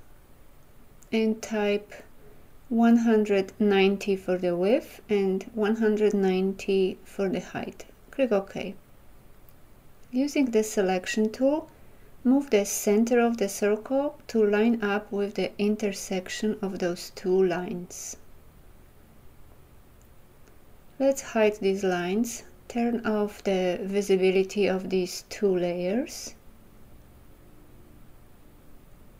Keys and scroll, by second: 10.8 v.